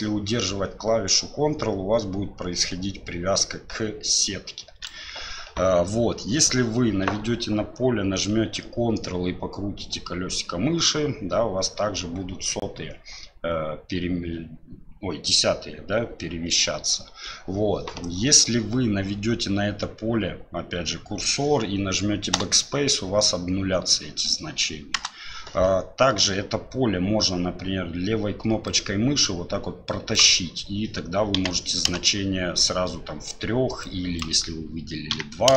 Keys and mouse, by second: 22.3 BackSpace, 24.9 BackSpace, 28.6-32.5 drag, 33.8-35.5 drag.